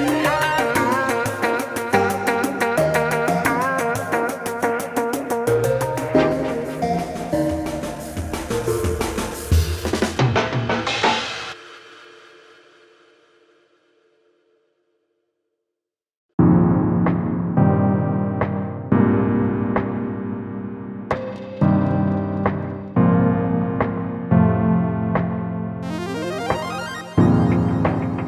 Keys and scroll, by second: 2.3 shift+F6, 9.2 ctrl+j.